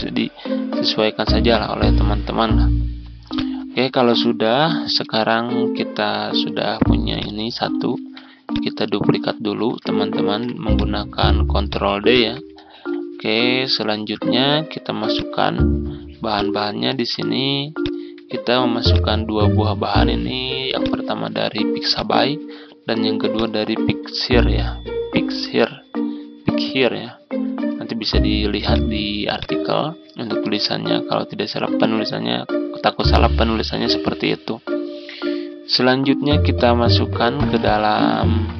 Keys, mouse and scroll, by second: 0.5 ctrl+z, 2.1-2.5 scroll up 1, 2.5-3.2 scroll down 1, 3.2 click, 4.8 Delete, 6.4-6.8 ctrl+scroll down 1, 7.0 click, 7.8 ctrl+d, 8.4-10.5 drag, 12.0 shift+click, 12.5-13.2 ctrl+scroll down 1, 13.2-15.0 scroll up 1, 15.0 click, 17.7 ctrl+click, 18.8 click, 28.6-38.5 ctrl+drag.